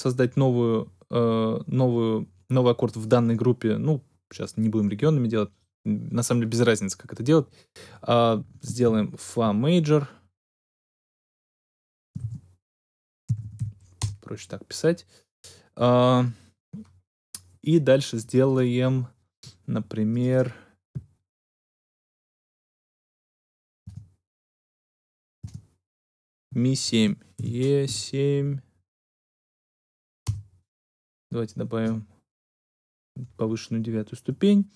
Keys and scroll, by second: 8.8 shift+f, 12.1-14.0 typing, 23.8 Tab, 25.3 Tab, 27.3 shift+e, 27.8 shift+7, 28.4 7, 30.2 Return.